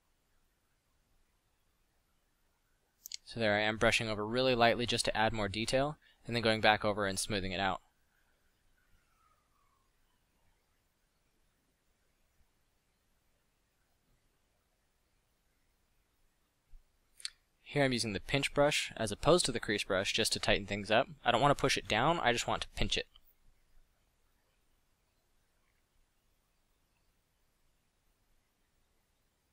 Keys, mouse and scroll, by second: 0.1 f, 5.1 middle drag, 11.0 f, 12.8 f, 17.2 f, 20.8-21.4 middle drag, 24.7 f.